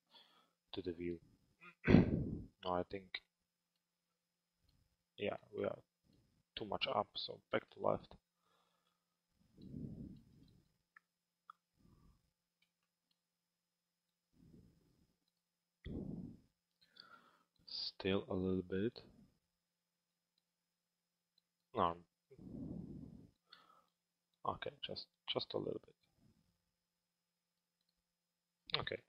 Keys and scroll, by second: 6.7 l, 28.6 p.